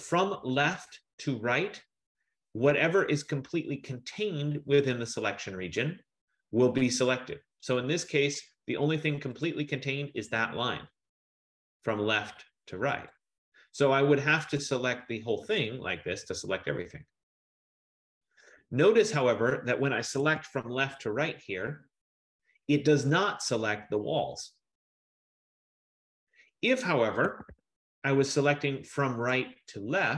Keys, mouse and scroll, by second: 0.9 click, 9.5 click, 12.0 click, 13.2 click, 14.7 click, 16.0 click, 20.3 Escape, 21.2 click, 23.0 click, 27.5 Escape, 27.6 Escape, 29.4 click.